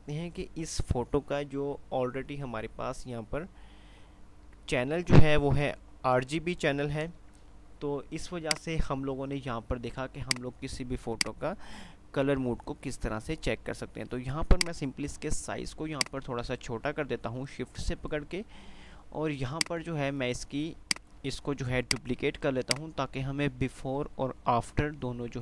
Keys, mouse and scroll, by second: 7.2 F5, 8.5-12.7 drag, 12.3 click, 16.2-18.5 shift+drag, 18.3 shift+click, 22.5 F2.